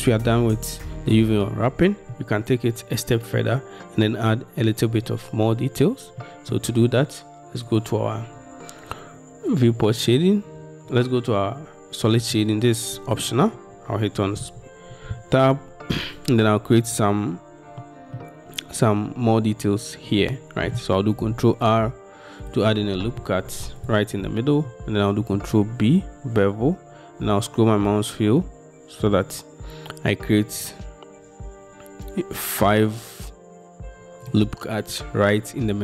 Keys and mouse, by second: 6.3 middle click, 13.5 Tab, 21.3 ctrl+r, 25.4 ctrl+b.